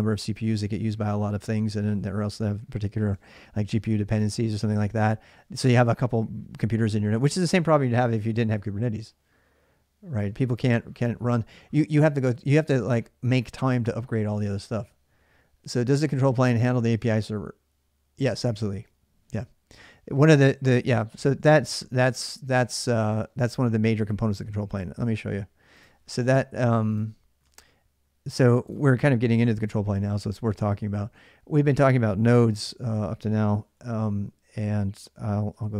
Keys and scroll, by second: 27.2 alt+Tab, 35.0-35.7 typing.